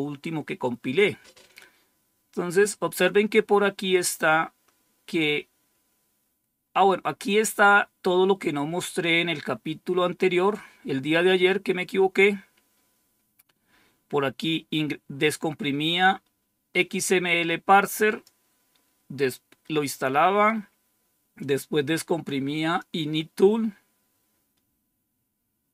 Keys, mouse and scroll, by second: 11.6-12.2 scroll up 1, 12.2-13.3 scroll up 1, 13.3-15.2 scroll up 1, 15.2-18.2 drag, 19.0-19.7 scroll down 1, 19.7 scroll down 1, 21.3-22.7 drag, 24.0-24.7 scroll down 2, 25.3-25.7 scroll down 2.